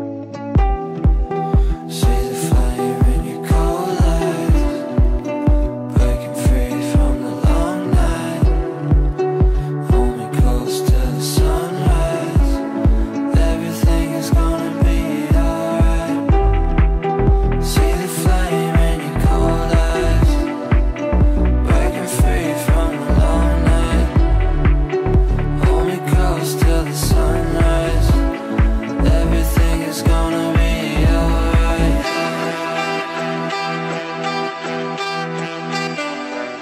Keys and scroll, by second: 22.1 Delete, 28.4 Delete, 33.9 Delete.